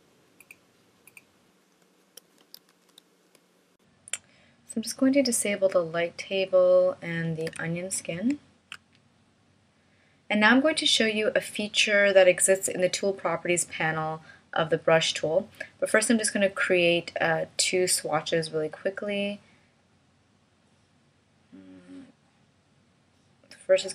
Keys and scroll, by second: 2.3 space, 3.3 shift+m, 8.2 alt+super+o.